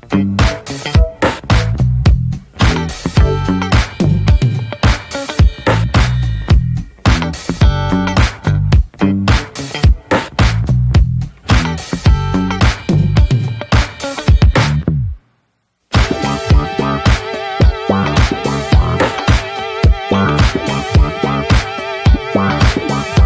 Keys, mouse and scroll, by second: 0.7-1.0 scroll down 1, 1.1-3.9 middle drag, 3.9-14.1 drag, 14.1 ctrl+z, 15.7 click, 16.4 ctrl+z, 18.2-23.2 drag.